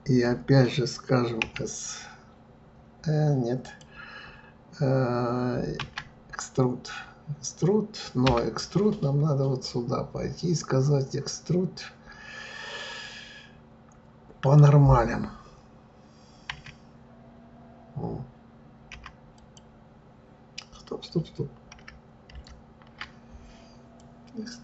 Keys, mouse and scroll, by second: 1.4 s, 5.8 e, 9.6-12.6 drag, 16.5 e, 22.3 ctrl+z, 23.9 click.